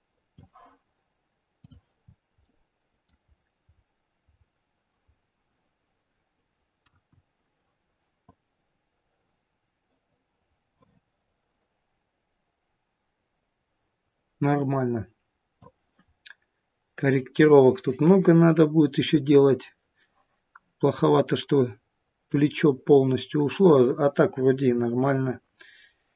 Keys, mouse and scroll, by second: 1.6 click, 2.1 scroll down 3, 2.4 middle click, 3.3-4.1 scroll up 4, 4.3 scroll down 1, 4.4-5.5 scroll down 1, 6.9 KP_1, 8.3 click, 16.1-16.5 scroll down 1.